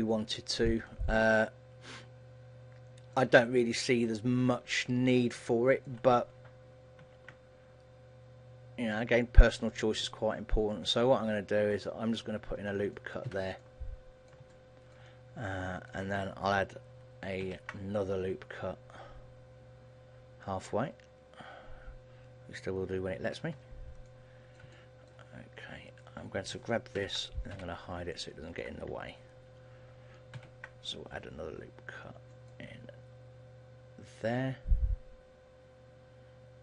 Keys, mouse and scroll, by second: 0.3 shift+middle click, 0.9 middle click, 3.5 shift+middle click, 4.3-4.7 scroll down 3, 4.7 middle click, 6.1 shift+middle click, 7.2 ctrl+r, 13.3 click, 13.7 middle click, 13.7 a, 14.7 shift+middle click, 15.3 middle click, 17.5 ctrl+r, 24.1 middle click, 24.9 shift+middle click, 26.0 right click, 27.1 ctrl+l, 27.9 h, 28.3 middle click, 30.5 ctrl+r.